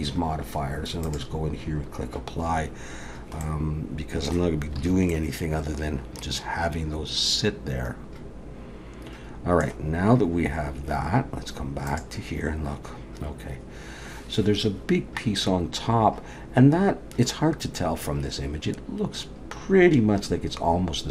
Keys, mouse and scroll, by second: 1.0 click, 3.4 middle click, 4.8 alt+a, 5.1 middle click.